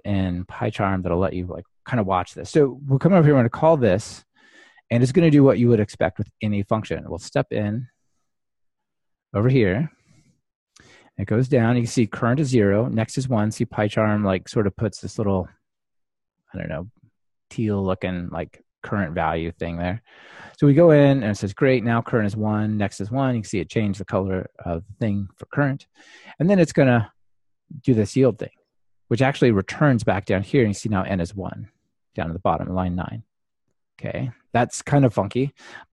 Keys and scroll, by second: 9.0 alt+shift+F7, 20.4 alt+shift+F7, 29.4 alt+shift+F7.